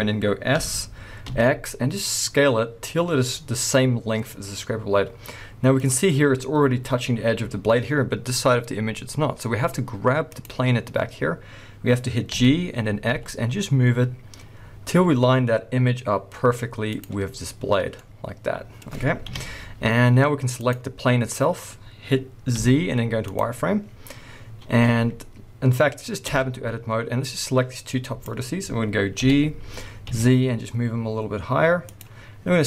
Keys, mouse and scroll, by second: 0.5 s, 5.9 click, 10.2 click, 12.3 g, 17.0 click, 18.0-19.2 middle drag, 19.2 KP_1, 20.5 click, 22.6 z, 26.3 Tab, 27.2-32.4 drag, 29.2 g, 32.6 click.